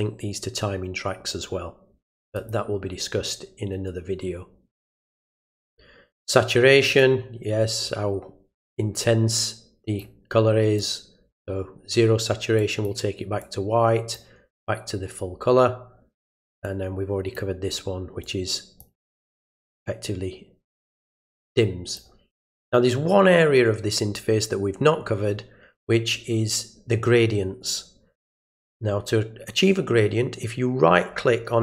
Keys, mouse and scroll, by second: 2.3 click, 4.8 click, 7.0-8.6 drag, 9.4 click, 10.8-11.4 drag, 12.6 click, 13.4-14.1 drag, 16.6-17.3 drag, 18.2-18.8 drag, 19.2-22.0 drag.